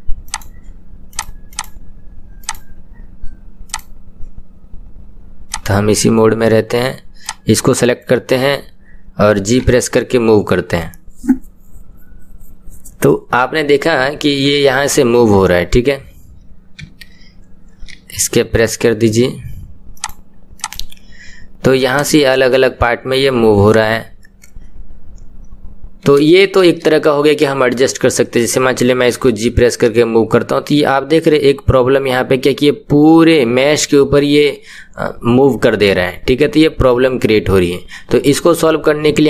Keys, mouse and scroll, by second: 2.5-3.7 drag, 5.6-8.0 drag, 9.8 g, 22.2-23.7 drag, 25.5-26.1 scroll down 1, 26.3-29.1 shift+middle drag, 29.1 g.